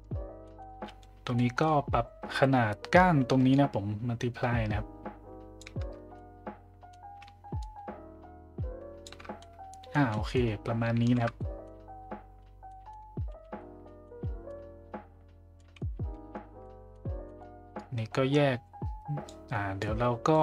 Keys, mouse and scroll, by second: 0.4 middle click, 1.4 middle click, 3.5-5.6 shift+drag, 6.1 middle click, 7.6-9.1 shift+drag, 9.4-9.9 middle drag, 10.1 middle drag, 11.3 shift+z, 11.4 middle drag, 12.7 middle drag, 13.6 middle drag, 13.6 z, 14.0-14.4 middle drag, 15.6 middle click, 16.7 middle click, 17.3 middle click, 17.8-19.3 drag, 19.8 click.